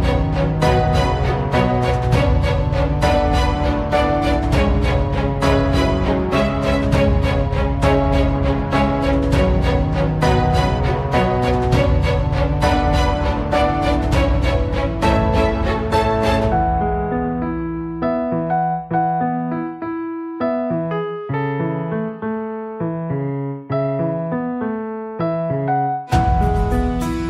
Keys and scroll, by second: 15.3 Return, 17.5 Return, 19.1 Escape, 22.9 Escape.